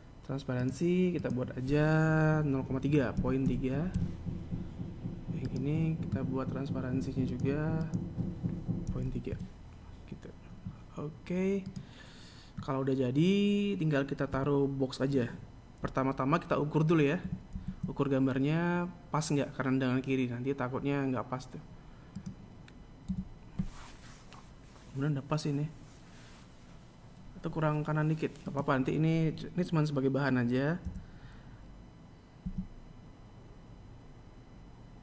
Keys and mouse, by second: 2.3 right click, 4.0 click, 4.6-11.1 drag, 11.1 KP_1, 14.3 shift+a, 24.0 z, 29.3 right click, 31.7 g.